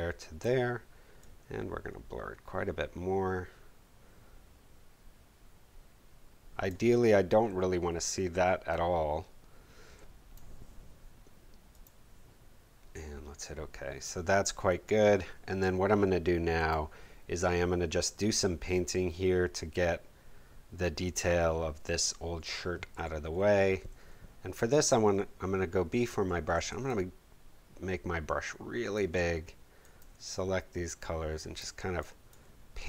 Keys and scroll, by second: 22.9 b.